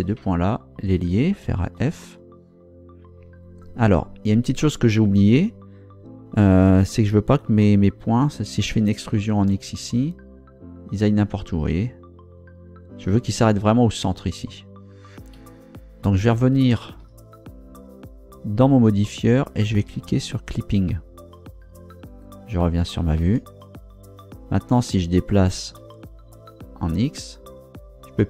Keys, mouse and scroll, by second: 1.8 f, 9.1 e, 9.5 x, 15.3 Escape, 17.0 ctrl+Down, 20.3 click, 23.2 ctrl+Down, 25.8 g, 26.8 x.